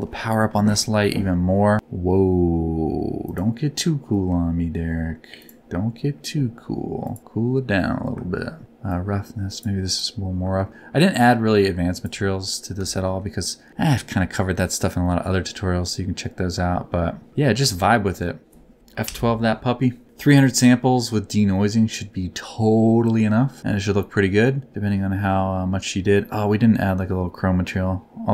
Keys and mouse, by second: 3.2 click, 4.0 middle click, 8.8 click, 9.0 click, 9.9-12.0 drag, 12.8 shift+middle click, 17.8-19.0 shift+middle drag, 19.4 F12.